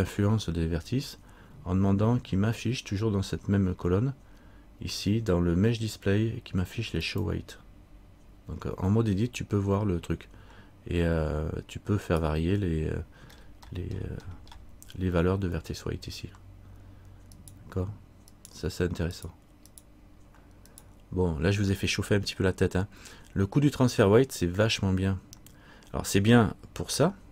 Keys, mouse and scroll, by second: 2.5-7.2 scroll down 1, 7.2 click, 12.2 right click, 13.5-13.8 scroll up 1, 15.7-17.5 scroll up 19, 17.5 right click.